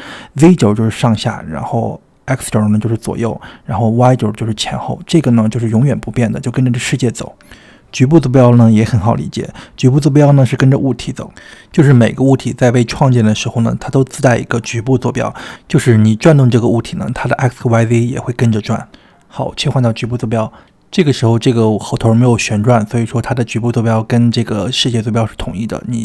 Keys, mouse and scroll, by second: 18.6-19.8 drag.